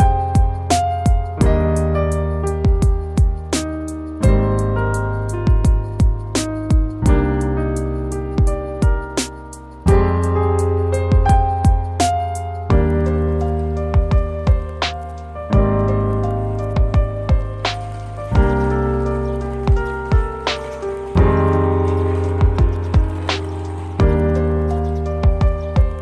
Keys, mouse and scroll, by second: 5.4 scroll up 1, 6.5 scroll up 1, 7.3 scroll down 1, 14.5 scroll down 1, 14.8 middle click, 17.0 middle click, 19.3 4, 19.7 Return, 19.7 5, 21.1 Return, 21.1 scroll down 1, 21.9 middle click, 22.3 scroll up 1.